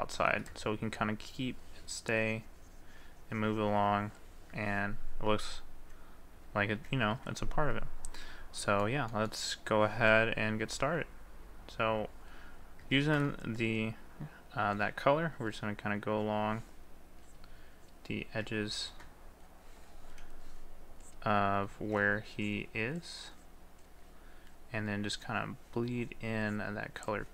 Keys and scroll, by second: 6.3 ctrl+z, 13.0 ctrl+z, 21.9 ctrl+z.